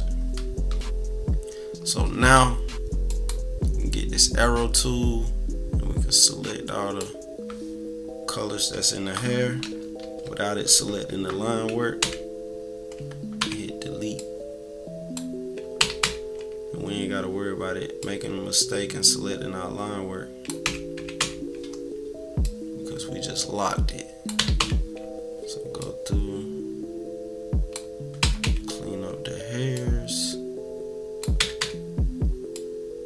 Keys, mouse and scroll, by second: 3.1-4.6 drag, 4.7-8.5 drag, 8.5 scroll up 2, 9.6 =, 12.0 Delete, 12.9 scroll down 2, 13.3 Delete, 14.1-15.1 drag, 15.7 Delete, 16.0 Delete, 16.3-17.0 scroll down 2, 18.0-20.5 drag, 20.6 Delete, 21.0 Delete, 21.2 Delete, 21.6 scroll up 1, 22.4-24.3 drag, 24.4 Delete, 24.6 Delete, 24.9 scroll down 2, 25.8-27.7 drag, 28.2 Delete, 28.4 Delete, 28.6-29.2 scroll down 4, 29.7-31.2 drag, 31.4 Delete, 31.6 Delete, 32.5-33.0 drag.